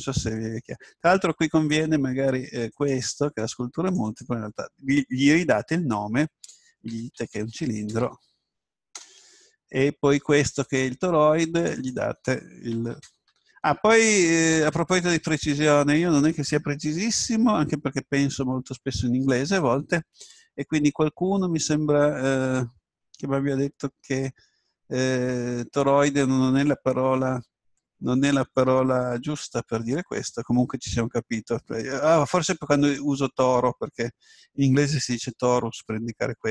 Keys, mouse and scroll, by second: 3.3 right click, 3.9-7.8 drag, 10.6 right click, 11.6-14.2 drag.